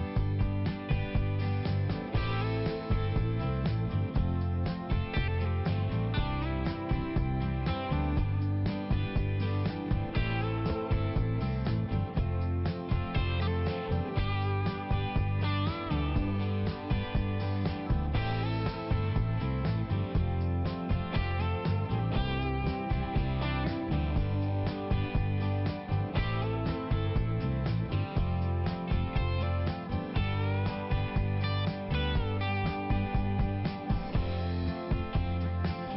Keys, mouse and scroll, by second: 0.3 right click, 1.2 click, 2.9 click, 3.9 click, 4.3 middle click, 5.6 click, 9.7 click, 11.9 scroll up 1, 13.4 click, 14.1 click, 15.9 click, 16.0 click, 16.3 right click, 16.4 double right click, 17.0 m, 18.2 click, 19.7 click, 19.7 typing, 21.1 click, 22.5 click, 23.1 click, 23.5 middle click, 25.0 click, 29.6 click, 30.3 click, 31.4 click, 32.4 click, 33.4 click, 33.4 click.